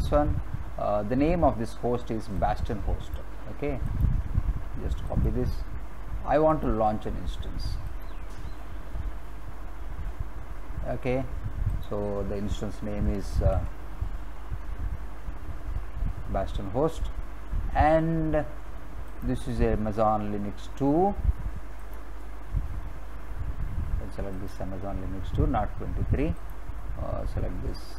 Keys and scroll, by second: 13.4 ctrl+v.